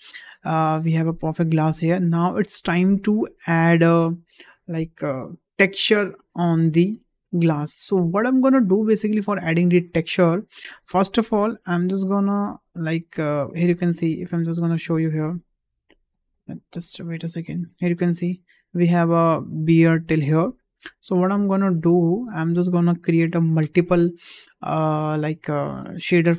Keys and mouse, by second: 0.8-1.9 middle drag, 2.0 `, 12.7-13.4 middle drag, 14.0 middle click, 14.6-15.8 drag, 16.3 drag, 16.5 click, 17.4-17.9 drag, 21.2 ctrl+z, 21.7 `.